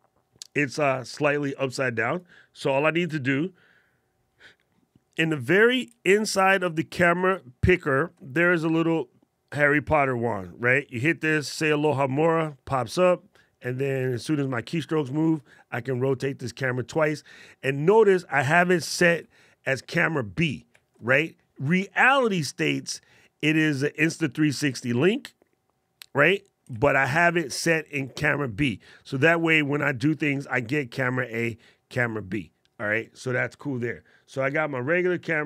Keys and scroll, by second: 6.9 alt+super+8, 9.7 alt+super+8, 18.9 alt+super+8, 20.6 alt+super+8, 24.4 alt+super+8, 26.6 alt+super+8.